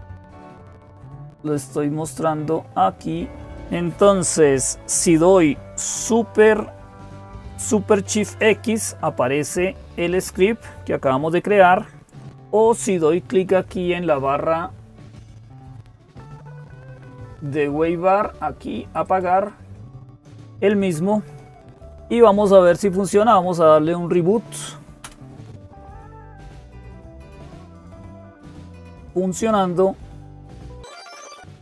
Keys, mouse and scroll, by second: 0.1 click.